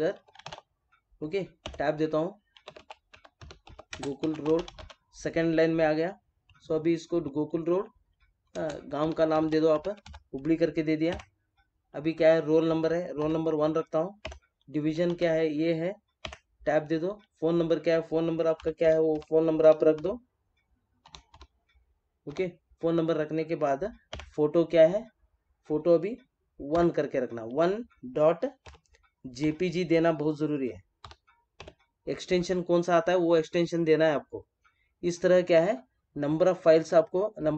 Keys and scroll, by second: 1.6 Tab, 3.9 space, 8.5 space, 11.0 Tab, 14.2 Tab, 16.2 Tab, 24.1 Tab.